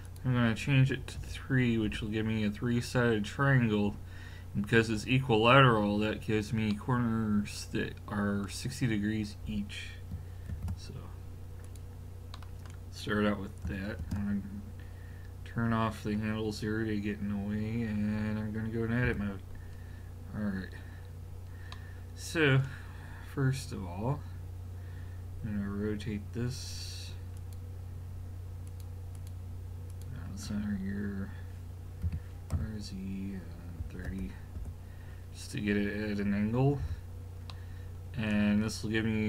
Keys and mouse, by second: 0.0 click, 6.7-7.1 middle drag, 10.5 ctrl+a, 14.0 ctrl+space, 19.1 Tab, 27.4-31.0 drag, 32.0 r, 36.8 a, 37.5 middle click.